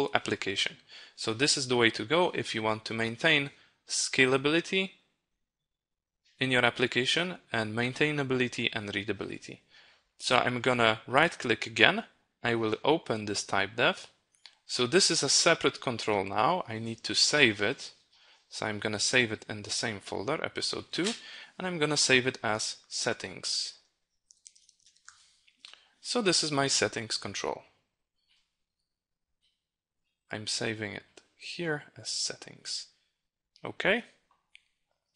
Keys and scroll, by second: 16.9 ctrl+s.